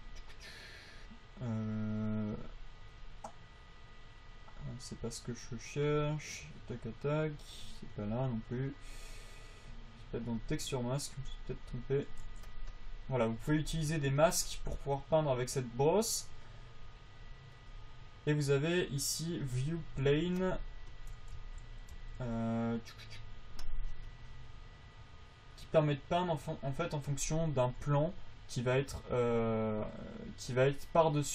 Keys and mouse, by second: 6.6-7.7 drag, 12.0 click, 12.6 f, 14.3 f, 20.5 f, 21.8 v, 22.3 v.